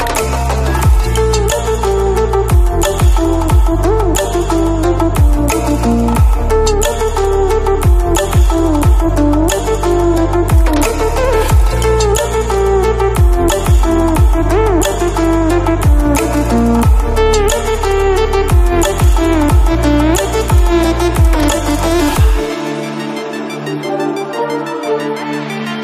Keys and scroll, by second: 0.2 Escape, 6.8 Return, 22.4 Return.